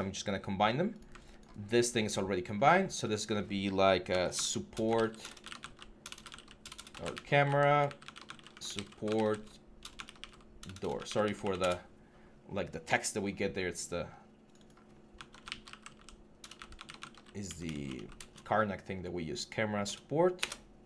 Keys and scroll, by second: 4.1-11.5 typing, 15.0-17.5 typing, 19.7 BackSpace, 20.2 Return.